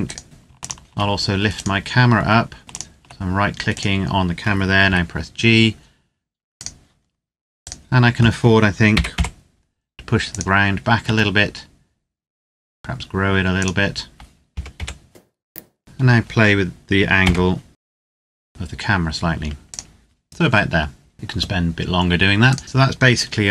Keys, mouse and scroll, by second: 0.4 shift+click, 1.3 right click, 1.9-2.2 scroll up 1, 2.2-2.6 scroll down 1, 2.6 shift+click, 3.5 right click, 4.6 g, 6.3 click, 6.8-7.5 scroll down 1, 7.5 right click, 8.7 g, 8.8 y, 10.2 click, 10.8 s, 13.5 click, 14.4 g, 14.8 y, 15.4 click, 15.6 scroll up 1, 15.8 right click, 17.0 g, 17.8 right click, 18.0 r, 18.3 x, 19.6 click, 22.4 right click.